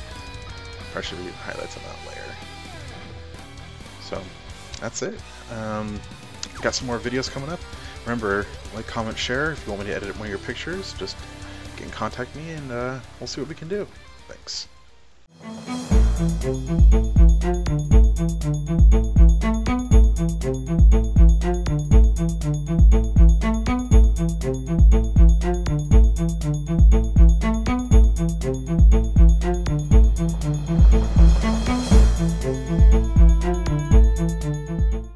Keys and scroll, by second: 0.3 ctrl+alt+z.